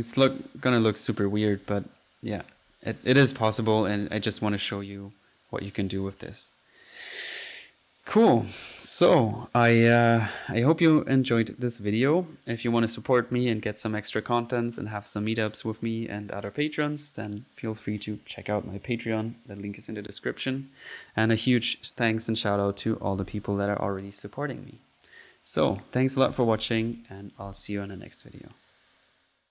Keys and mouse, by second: 0.8 right click, 1.1-1.5 drag, 1.7 click, 2.8-3.6 typing, 5.2 click, 5.7 click, 6.7 click, 7.6 middle click, 9.3 click, 11.6-12.4 typing, 11.9 click, 12.1-12.6 drag, 21.2-22.0 typing, 28.1-29.5 typing.